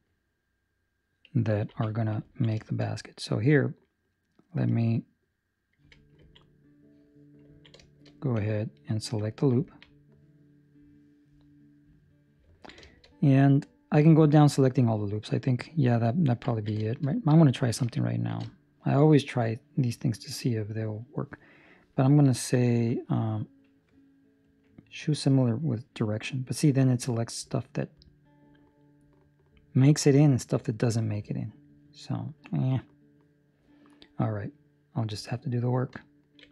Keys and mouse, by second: 1.6 ctrl+s, 2.3 ctrl+middle click, 2.5 shift+middle click, 3.0 right click, 3.4 middle click, 6.1 Tab, 6.3 ctrl+middle click, 6.4 middle click, 7.5 ctrl+middle click, 8.0 shift+middle click, 8.8 alt+right click, 9.6 ctrl+middle click, 9.8 ctrl+middle click, 12.5 ctrl+middle click, 12.8 shift+middle click, 13.0 middle click, 14.6 middle click, 14.8 shift+middle click, 16.4 ctrl+middle click, 16.6 ctrl+middle click, 16.8 shift+middle click, 17.0 middle click, 18.2 shift+g, 25.6 middle click, 26.6 middle click, 31.7 middle click, 35.4 alt+right click.